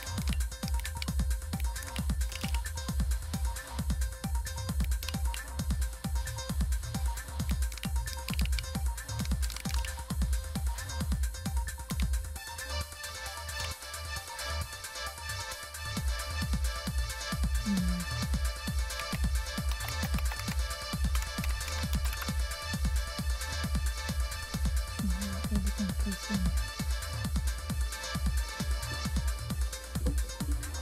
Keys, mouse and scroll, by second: 0.2 ctrl+c, 0.8 super+Right, 1.8 ctrl+v, 2.3 Return, 2.4 Return, 2.5 Return, 6.1-7.4 ctrl+drag, 7.7 ctrl+c, 8.2 super+Left, 8.5 super+Left, 8.9-10.1 typing, 10.6-11.9 right drag, 11.1 click, 11.9 Right, 13.5 Return, 18.9-22.3 typing.